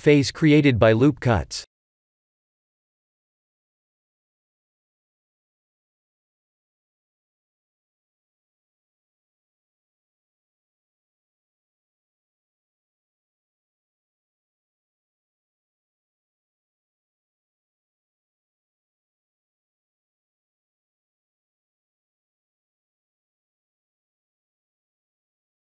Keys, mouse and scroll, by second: 0.5 ctrl+r, 9.5 ctrl+z, 10.2 ctrl+r, 16.1 ctrl+r, 19.0 3, 19.4 click, 19.9 middle click, 20.0 middle click, 20.3 middle click, 20.5 x, 21.7 middle click, 21.9-22.4 middle click, 22.1 middle click, 22.1 middle click, 22.2 middle click, 22.9 middle click, 23.0-23.5 middle click, 23.3 middle click, 23.8 Tab, 24.9 middle click, 25.4 middle click.